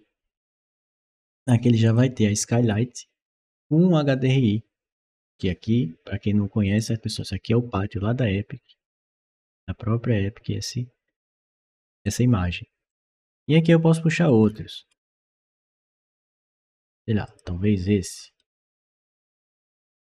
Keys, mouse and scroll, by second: 0.3 click, 0.9 middle click, 1.7 click, 6.6 click, 6.9 click, 11.9 click, 12.7 click, 14.0-15.1 middle drag, 17.1 click, 18.2 right click.